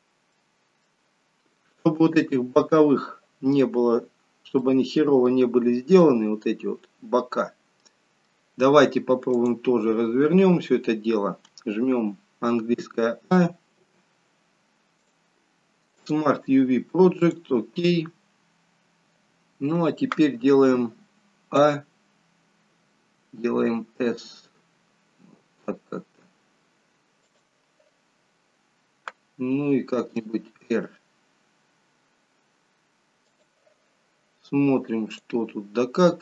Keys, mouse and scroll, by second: 0.4 middle click, 0.4 scroll down 1, 4.6 middle click, 5.5-6.1 scroll up 3, 6.1 middle click, 7.4-8.1 scroll down 2, 7.9 middle click, 35.3 click.